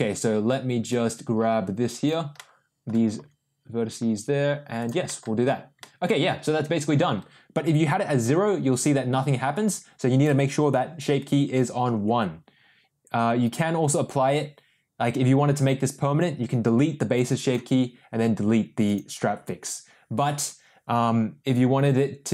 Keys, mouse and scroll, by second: 0.9-2.0 drag, 2.3 middle click, 3.1 g, 5.1 middle click, 5.8 middle click, 6.5 Tab, 7.8-10.3 drag, 13.4 click, 17.2 click, 18.9 click.